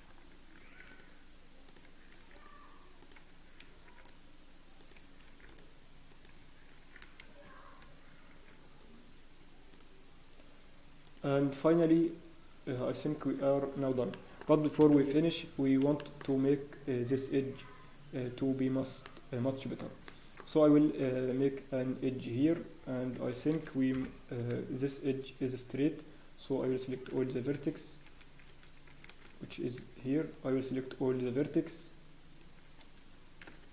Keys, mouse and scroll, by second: 0.6 ctrl+r, 7.8 ctrl+r, 11.9 ctrl+r, 13.0-13.4 scroll down 6, 13.1 Tab, 14.0 Tab, 14.1 middle click, 14.1-14.8 scroll down 6, 14.8 KP_1, 15.3 scroll down 1, 15.9 shift+middle click, 16.2 scroll up 1, 17.2 Tab, 18.5 Tab, 18.7 Tab, 19.4 middle click, 19.4 scroll up 1, 19.8 Tab, 20.0 middle click, 20.8 ctrl+r, 24.0 KP_1, 24.6-26.5 scroll up 1, 26.5 click, 26.8 scroll down 1, 27.3 shift+z, 27.6 scroll up 1, 28.0 scroll down 3, 28.0 a, 29.0 a, 29.0 scroll up 1, 29.8 b.